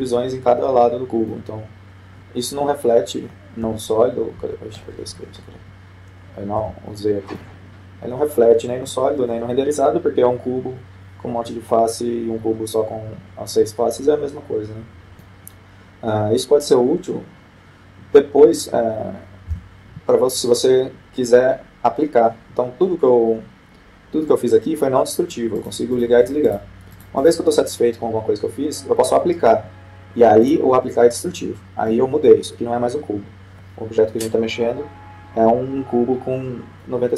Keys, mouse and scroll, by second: 5.1 s, 8.1 z, 8.9-10.4 middle drag, 15.6-17.0 middle drag, 21.0 z, 22.0-23.5 middle drag, 27.2-30.2 drag, 32.0-33.3 drag, 33.5-35.0 middle drag.